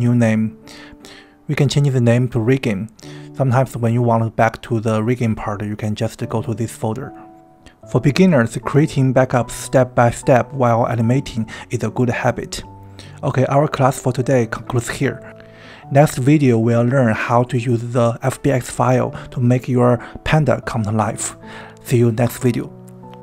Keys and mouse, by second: 18.1 click, 21.1 Tab, 22.8-23.2 drag.